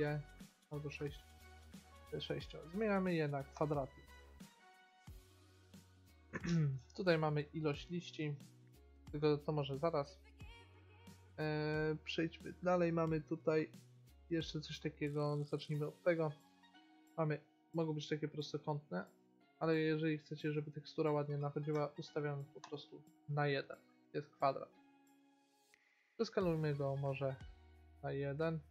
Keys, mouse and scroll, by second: 2.3-4.4 drag, 6.5-12.5 middle drag, 16.9-18.6 drag, 20.3-22.3 drag, 23.5-26.2 middle drag, 26.2-27.8 drag.